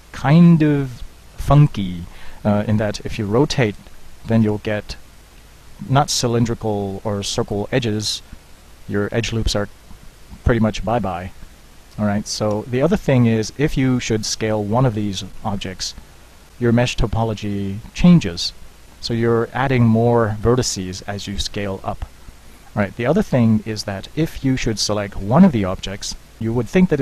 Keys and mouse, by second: 0.9 right click, 1.4 right click, 3.0 middle click, 3.7 KP_1, 4.5 r, 13.3 middle click, 15.9 s, 17.5 Tab, 18.1 s, 24.2 Tab, 25.3 Tab, 26.2 g.